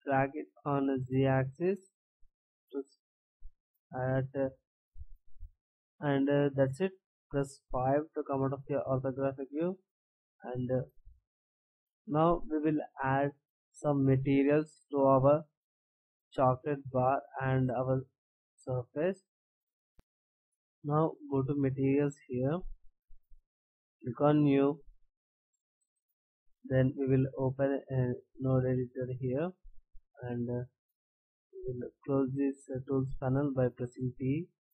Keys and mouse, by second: 3.0-5.0 right drag, 9.9-11.3 middle drag, 18.3-19.6 middle drag, 21.8-23.7 drag, 24.3-27.2 drag, 27.6-29.0 drag, 29.0-29.6 drag, 30.6-31.7 drag, 33.8 t, 34.3 t.